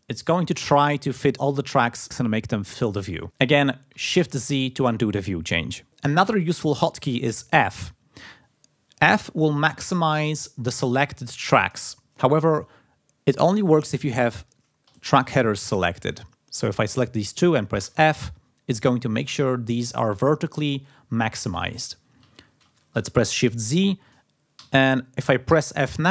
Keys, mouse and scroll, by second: 3.2 z, 4.2 shift+z, 14.3 click, 15.2 ctrl+click, 17.8 f, 22.6 shift+z, 23.7 click, 24.5 f, 25.4 f.